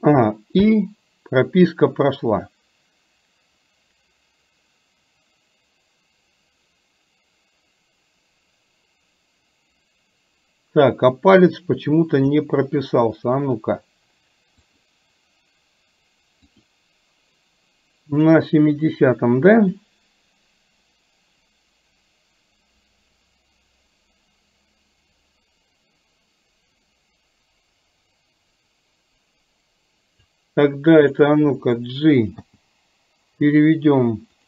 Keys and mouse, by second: 0.6 i, 2.4-12.4 drag, 14.8 click, 16.6 click, 18.4 click, 19.9-30.4 drag, 30.8 click, 32.5 g.